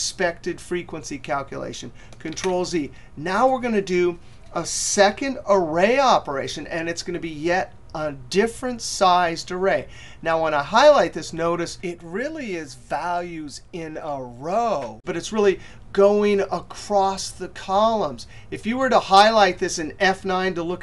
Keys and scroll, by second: 19.6 F9.